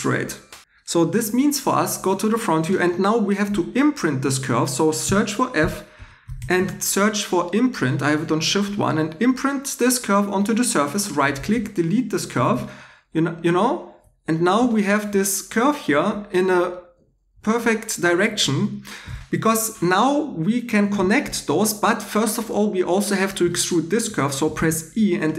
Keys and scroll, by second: 5.0-6.9 typing, 11.5 2, 12.4 x, 24.4 e.